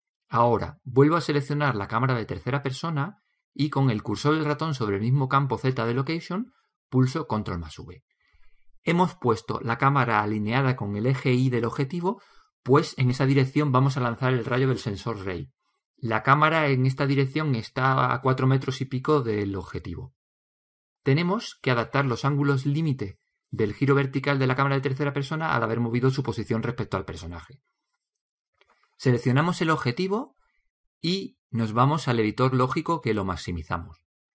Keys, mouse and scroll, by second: 0.1 ctrl+c, 2.8-4.7 right drag, 5.9 ctrl+v, 7.8 ctrl+v, 31.6-33.5 drag.